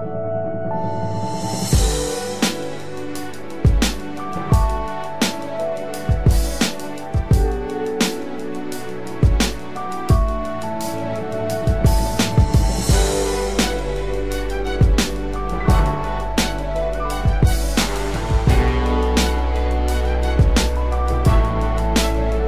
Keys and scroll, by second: 21.7 ctrl+=.